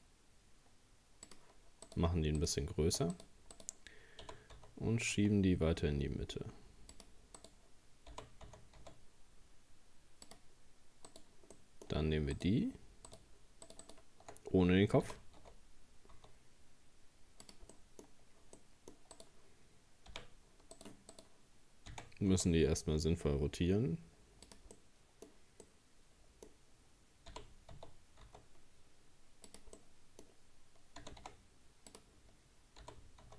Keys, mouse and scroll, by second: 1.9 right click, 2.4 shift+right click, 3.1 right click, 3.5 right click, 4.2 g, 7.4 right click, 8.1 g, 11.1 right click, 11.5 middle click, 12.3 shift+right click, 13.1 shift+right click, 13.7 shift+right click, 13.8 shift+right click, 15.0 g, 17.7 middle click, 18.1-18.5 scroll up 1, 18.6 middle click, 19.2 right click, 20.1 t, 20.8 right click, 21.1 right click, 21.9 r, 24.7-27.3 middle drag, 27.3 g, 29.8-31.0 middle drag, 31.0 g, 32.8 g.